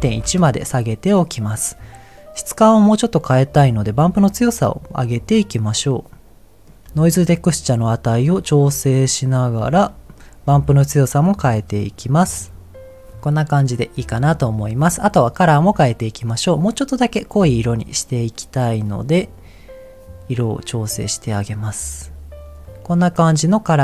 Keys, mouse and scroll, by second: 4.1-5.7 drag, 6.1 click, 6.6 middle click, 6.6 scroll up 3, 7.6-9.2 drag, 9.9 middle click, 11.5 click, 12.5 click, 13.2-13.6 scroll down 2, 13.6 middle click, 17.5 click, 18.1 click, 22.6 click, 23.3-23.8 middle drag.